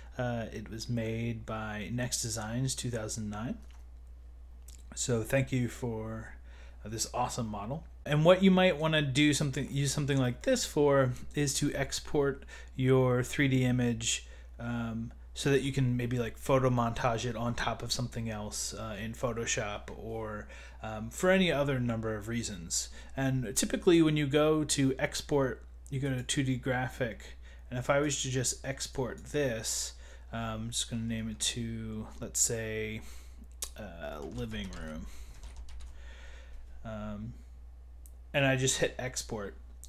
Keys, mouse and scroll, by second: 0.8-1.1 scroll down 2, 3.6 scroll up 2, 8.0-9.1 middle drag, 9.7 middle click, 23.9 click, 26.5 click, 34.0-36.2 typing, 37.7-38.5 typing, 38.7 click.